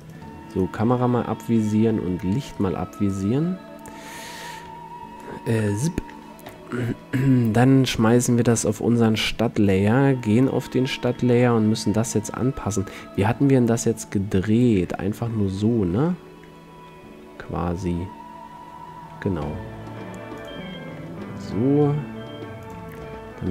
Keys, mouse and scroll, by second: 1.8-2.5 drag, 2.5 middle click, 2.7-4.8 drag, 4.8 KP_1, 5.8 KP_7, 6.6 m, 10.6 click, 11.4-13.3 middle drag, 13.3-15.0 drag, 15.0-18.0 middle drag, 16.9 r, 20.6-22.5 drag, 21.1 g, 22.8-23.5 drag.